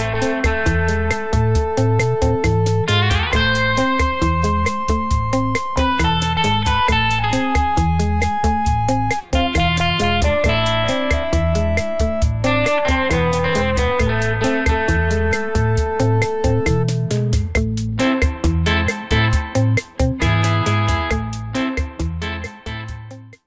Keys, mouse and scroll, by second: 0.5 click, 1.8 click, 2.3 click, 3.5 click, 4.1 click, 6.7 click, 7.4 click, 8.2 click.